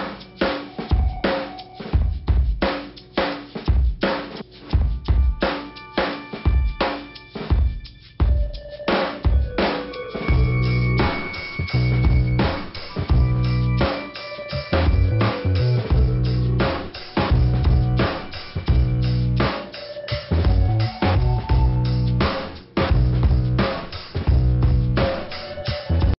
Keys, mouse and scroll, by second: 0.6 click, 2.3 click, 2.9 scroll down 2, 5.1 click, 7.5 click, 8.5 click, 10.1 click, 11.2 click, 11.3 click, 12.7 click, 14.5 click, 15.5 click, 16.4 click, 18.9 click, 20.6 click, 21.3 click, 23.2 click, 23.3 click, 24.8 click, 25.7 click.